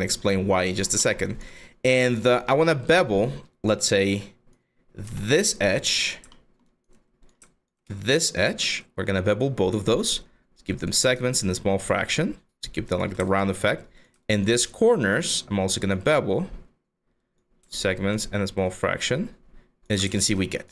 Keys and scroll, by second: 1.2 5, 4.7 q.